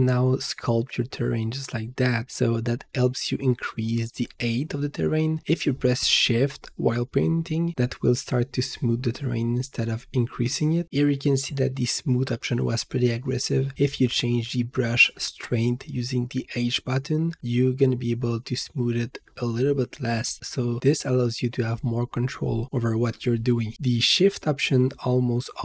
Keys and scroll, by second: 17.9 h.